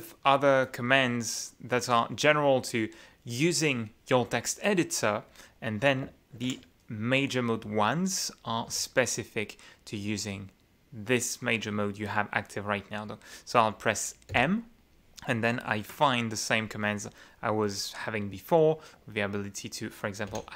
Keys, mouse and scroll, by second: 0.7-2.1 drag, 2.9-4.0 drag, 4.0 scroll up 2, 6.4 shift+F9, 8.7 F9, 14.3 m, 20.3 d.